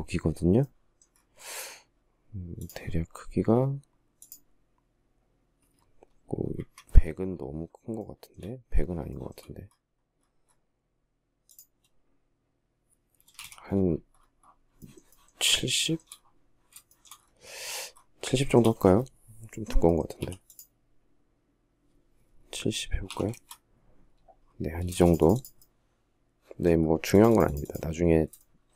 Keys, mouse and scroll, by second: 5.8 Escape, 8.3 shift+middle click, 12.5 space, 12.6 Escape, 14.0 shift+middle click, 14.3 shift+middle click, 15.2 shift+scroll, 16.1 shift+middle click, 17.7 shift+middle click, 19.4 p, 21.9-22.8 typing, 24.1 space, 27.7 shift+middle click.